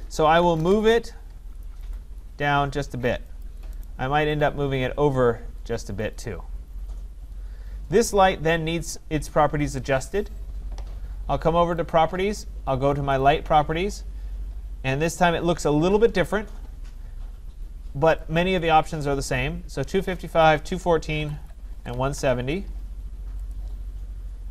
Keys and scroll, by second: 0.6 Return, 21.5 Tab.